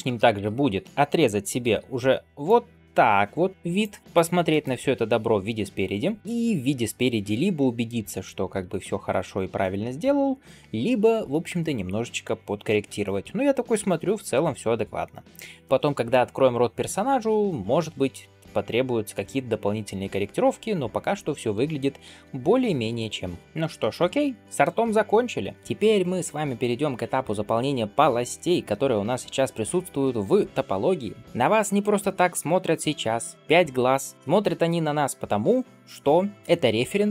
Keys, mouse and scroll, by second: 0.0 ctrl+KP_3, 0.8 shift+middle click, 1.4 alt+b, 4.4 shift+middle click, 4.7-5.7 scroll up 2, 6.2-7.8 middle drag, 8.1 shift+middle drag, 8.5-8.8 scroll up 1, 8.8-9.4 middle drag, 9.6 shift+middle drag, 10.0-12.6 middle drag, 12.9 shift+middle drag, 13.3 scroll down 1, 13.3 scroll down 1, 13.6-16.0 middle drag, 18.3 scroll down 2, 18.8-21.4 middle drag, 22.0 alt+b, 22.7 KP_1, 23.8 shift+middle drag, 24.2 scroll down 1, 24.5-25.3 middle drag, 31.2 click.